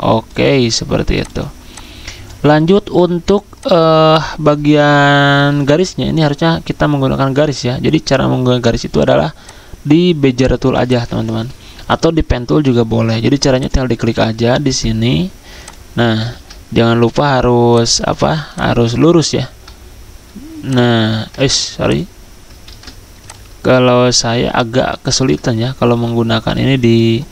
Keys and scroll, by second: 16.3 ctrl+z, 21.4 ctrl+z.